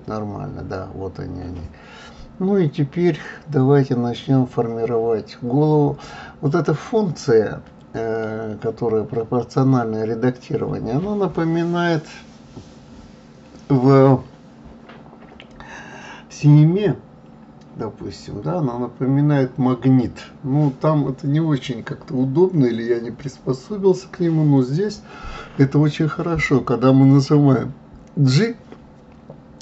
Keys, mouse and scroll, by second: 1.0-2.2 scroll up 1, 2.2 KP_3, 6.2 click, 9.2 click, 13.8 shift+click, 19.9 g.